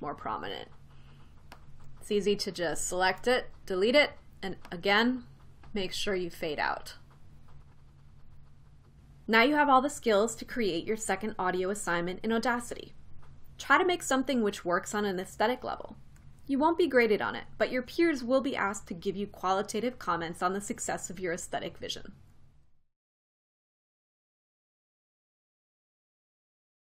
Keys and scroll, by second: 3.9 BackSpace.